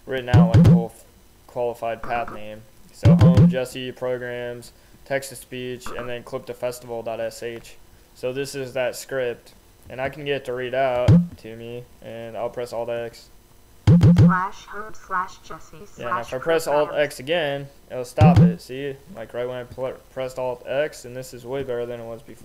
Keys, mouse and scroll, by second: 0.0 Left, 2.4 Right, 10.1 click, 11.2-11.8 scroll up 1, 13.0 alt+x, 17.2 alt+x, 20.0 click, 21.9 click.